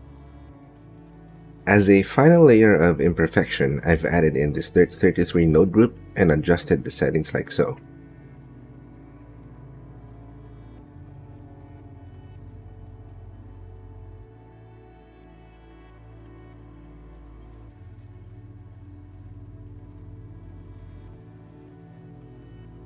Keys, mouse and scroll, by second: 2.2 click, 3.7 click, 3.7 right click, 4.4 click, 4.5 g, 6.4 click, 7.5-8.9 drag, 11.2 click, 12.0-13.9 shift+middle drag, 14.2 shift+middle click, 17.8 shift+click, 18.4 shift+click, 19.1 shift+right click.